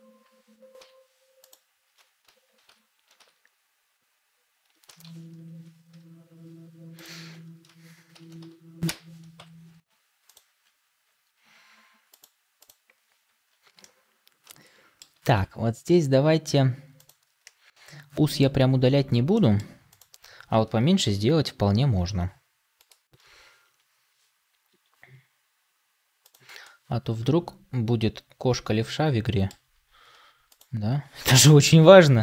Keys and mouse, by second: 0.7 ., 2.6 ctrl+m, 8.0 ctrl+m, 9.3 Tab, 13.7-14.9 middle drag, 17.3 middle click, 18.1 click, 19.2 click, 24.6 s, 26.5-29.4 middle drag, 30.4 click.